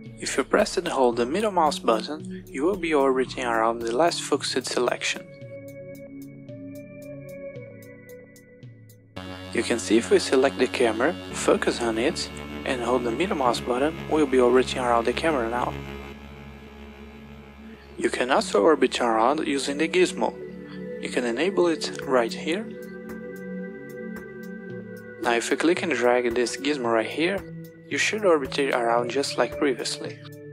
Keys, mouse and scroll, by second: 4.7-7.9 middle drag, 10.4 click, 11.6 KP_Decimal, 13.7-16.9 middle drag, 17.8 click, 17.8 KP_Decimal, 18.0 Home, 24.0 click, 27.8-29.6 drag, 29.8-30.5 drag.